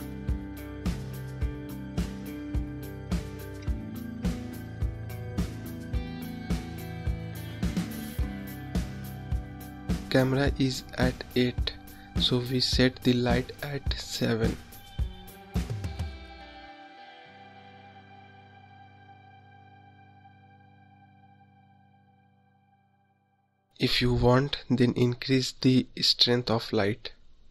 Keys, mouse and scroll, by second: 0.4-1.3 scroll up 3, 1.5-1.8 scroll down 3, 5.3 click, 9.7-15.9 drag, 19.1 click, 20.7-23.1 drag, 23.5-24.1 scroll up 6, 24.3-25.3 scroll down 7, 25.3 click.